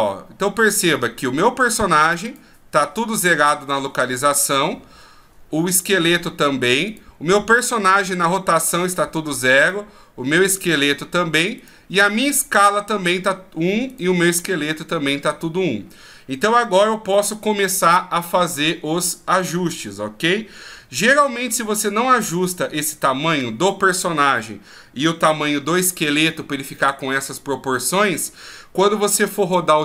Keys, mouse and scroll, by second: 2.2-17.4 right click.